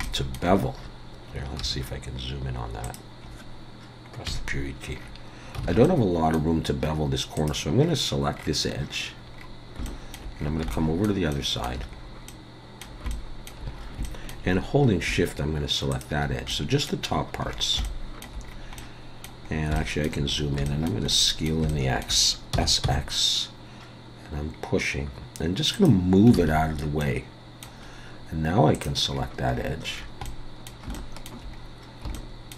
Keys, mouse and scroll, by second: 0.0 shift+middle click, 0.6 scroll up 1, 1.6 2, 2.8 click, 4.3 KP_Decimal, 4.9 scroll down 4, 5.6 scroll down 2, 5.6 alt+a, 5.8 middle click, 7.4 click, 7.7 scroll down 1, 8.8-9.8 scroll down 10, 9.8 shift+middle click, 10.3 scroll down 2, 10.5 scroll up 1, 10.7 shift+middle click, 11.3 shift+middle click, 11.9-12.4 scroll up 4, 12.3 middle click, 13.1 shift+middle click, 13.7 scroll up 1, 14.0 shift+middle click, 14.5 scroll up 2, 15.9 shift+click, 16.5 middle click, 17.0-17.4 scroll down 5, 17.3 scroll up 1, 17.4 scroll down 2, 17.8 shift+middle click, 18.4 scroll down 1, 18.8 middle click, 19.5 scroll up 3, 19.8 shift+middle click, 20.3 scroll up 3, 20.6 shift+middle click, 21.1 middle click, 21.7 shift+middle click, 22.5 s, 26.4 alt+a, 27.0 middle click, 27.9-28.4 scroll up 1, 28.4-28.7 scroll up 1, 28.7 click, 29.1-30.3 scroll down 14, 30.2 middle click, 30.9 shift+middle click, 31.6 scroll up 2, 32.1 shift+middle click.